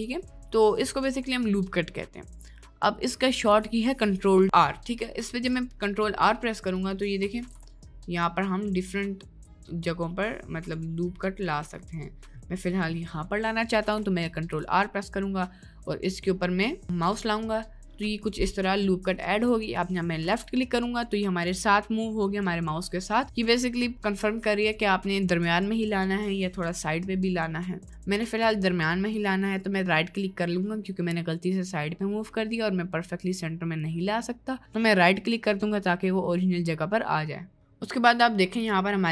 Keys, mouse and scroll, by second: 3.5 click, 4.5 ctrl+r, 5.3 ctrl+r, 7.4 ctrl+r, 12.0 middle click, 12.6 click, 13.1 click, 14.2 ctrl+r, 36.4 click, 38.6 click.